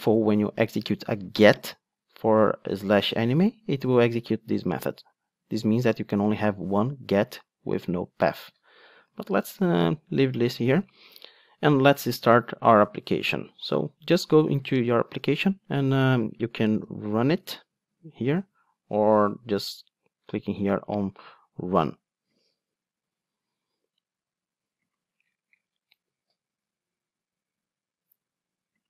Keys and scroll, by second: 9.2 super+z, 15.3 super+r, 22.8 ctrl+alt+r.